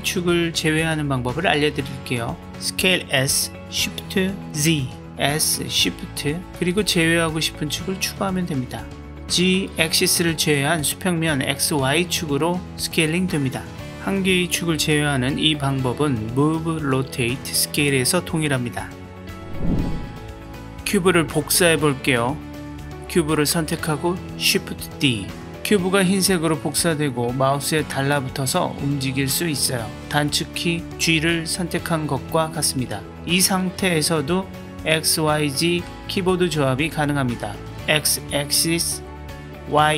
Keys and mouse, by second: 2.2 s, 10.5 middle click, 11.8 middle click, 12.0 middle click, 12.2 middle click, 22.1 click, 25.1 shift+d, 32.9 x, 39.0 y.